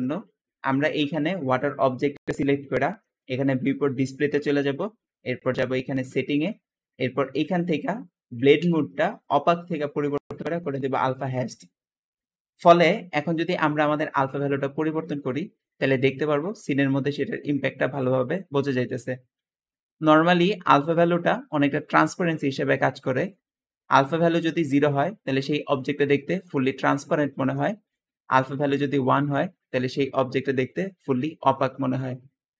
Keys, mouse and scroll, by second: 3.0 click, 3.9-4.5 scroll down 2, 4.5-5.1 scroll down 1, 5.9 scroll up 2, 5.9-6.3 scroll down 2, 6.2-7.2 middle drag, 6.3 scroll up 1, 6.4-7.2 scroll down 2, 8.9 click, 11.2 click, 13.0 click, 13.6 click, 27.2 Escape, 27.3 Escape.